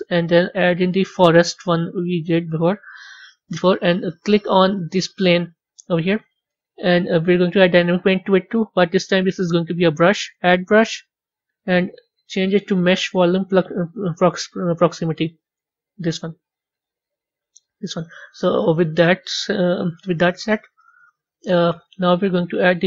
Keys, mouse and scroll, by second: 7.5 click, 8.6-10.1 drag, 10.7-11.9 scroll down 7, 11.9-14.0 drag, 14.0-15.0 scroll down 3, 15.0-16.6 drag, 17.2-18.0 scroll up 10, 21.4 click, 22.6 click.